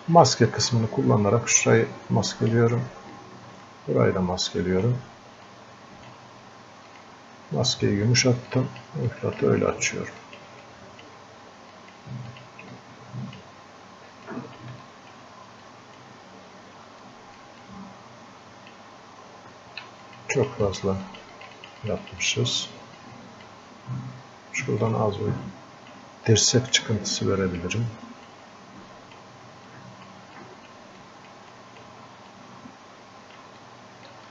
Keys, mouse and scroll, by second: 0.6-2.8 ctrl+drag, 3.5-5.0 ctrl+drag, 5.8 ctrl+click, 8.5-14.3 drag, 15.7-17.1 drag, 17.1 alt+click, 17.7-20.1 drag, 23.0-26.6 drag, 26.6 right click, 27.2 click, 28.3-29.8 drag, 29.8 click, 30.4-33.6 drag, 33.6 click.